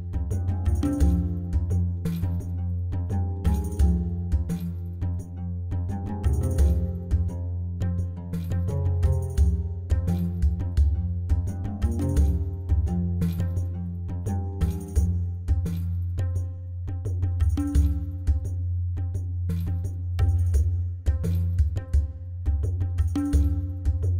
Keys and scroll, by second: 0.9 shift+a, 2.4 o, 2.5 i, 2.6 s, 24.0 Tab.